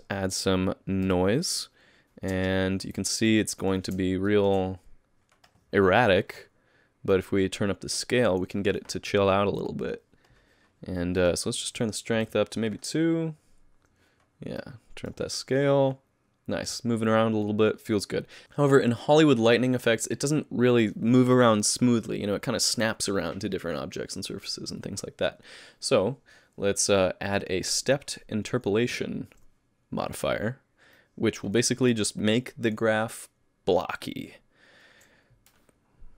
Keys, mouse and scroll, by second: 4.0 middle click, 4.0 shift+space, 4.3 shift+middle click, 7.1 click, 11.2 click, 13.1-13.6 scroll down 11, 14.6 click, 27.3 click, 27.7 click, 31.0 click.